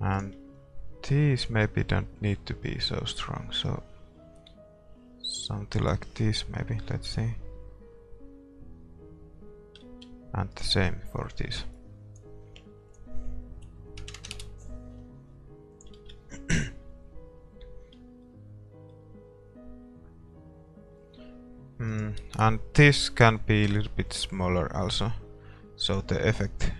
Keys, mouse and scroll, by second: 0.2-7.2 right drag, 7.2 shift+z, 10.0 shift+z, 10.6-15.8 right drag, 15.8-18.3 drag, 15.8 KP_0, 16.2 shift+z, 18.3-20.4 middle drag, 22.2-24.2 right drag, 24.2-26.3 drag.